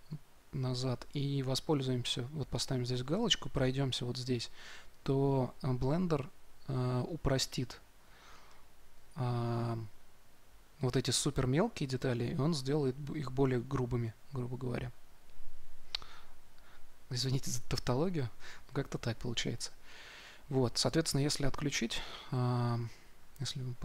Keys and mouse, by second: 4.1-23.2 drag, 23.3 middle click.